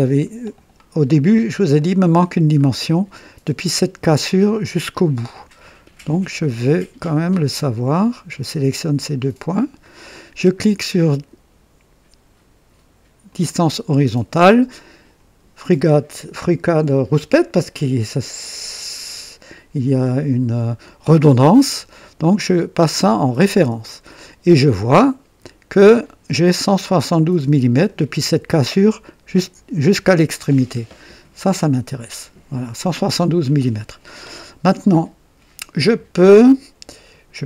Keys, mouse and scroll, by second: 1.2 scroll up 2, 1.7-2.6 right drag, 6.7 click, 9.4 click, 13.2 click, 23.2 click, 25.8 click, 27.2-28.0 drag, 30.4-31.0 scroll down 1, 32.4 click, 33.7 scroll down 2.